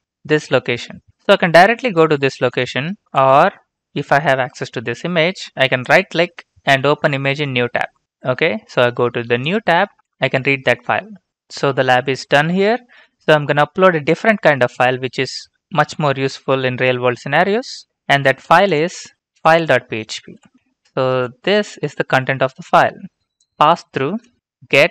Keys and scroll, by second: 3.6 alt+Tab, 20.2 ctrl+c, 20.5 typing, 21.0 ctrl+v, 21.5 Return, 24.0 typing.